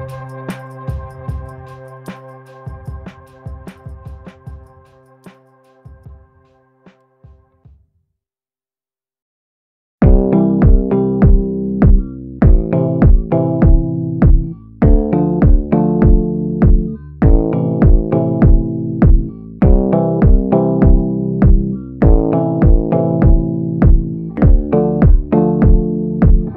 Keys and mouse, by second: 1.0 middle click, 2.8-5.0 middle drag, 7.1-8.1 middle drag, 8.5 middle click, 10.3 shift+middle click, 12.0-13.3 middle drag, 13.8-16.2 middle drag, 16.8 ctrl+i, 17.5 b, 20.2 b, 21.2 b, 22.2 b, 24.0 b, 24.7-25.7 middle drag, 26.0-26.5 typing.